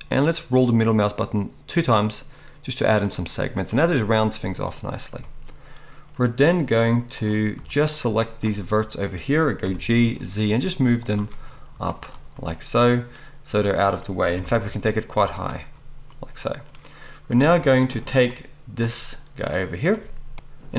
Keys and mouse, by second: 7.2-11.1 drag, 7.6 z, 9.6 g, 11.1-18.3 middle drag, 11.7 z, 14.3 g, 17.5 z, 18.3-20.7 drag, 20.3 middle click, 20.3 right click.